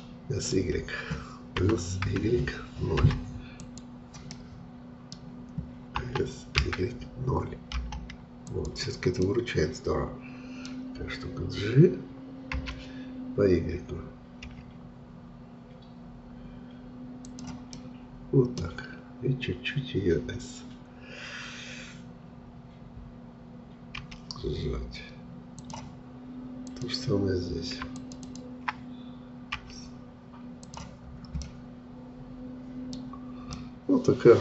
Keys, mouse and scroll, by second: 1.6 s, 4.3-6.0 middle drag, 6.0 s, 9.2-12.3 middle drag, 12.5 g, 17.7-20.7 middle drag, 24.0 s, 26.7-29.6 drag, 29.6 s, 31.4-33.1 middle drag, 33.1-33.5 scroll down 2, 33.5-34.4 middle drag.